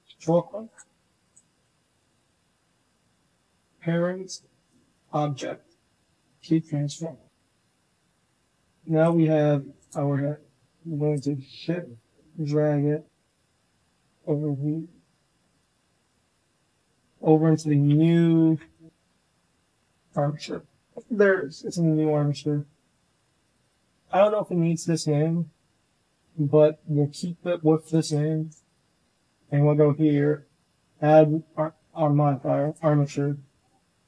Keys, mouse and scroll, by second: 1.2-4.9 drag, 6.2-7.7 drag, 9.3 g, 11.2 shift+click, 15.0-17.2 drag, 18.6 shift+click, 23.5 ctrl+click, 26.8 Delete, 28.0 ctrl+click, 29.3 click, 30.4-31.8 drag, 32.6-34.0 drag.